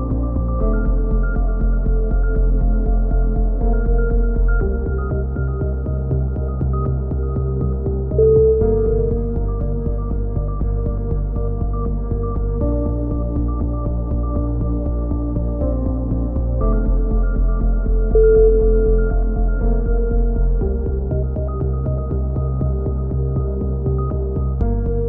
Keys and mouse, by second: 0.0 middle click, 0.1-2.0 right drag, 2.0 KP_3, 2.4 z, 2.7-3.7 drag, 5.5-6.8 drag, 5.5 b, 7.9 a, 8.1 z, 8.6 click, 9.4 middle click, 9.6-10.7 drag, 10.7 KP_3, 11.3 middle click, 11.4 z, 22.4 a, 22.8 middle click, 23.1 z, 23.4 click.